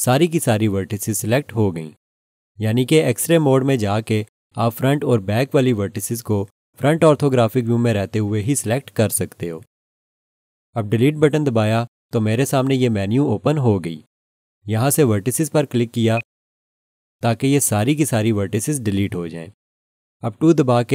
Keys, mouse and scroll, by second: 6.8 1, 11.7 Delete, 16.1 click.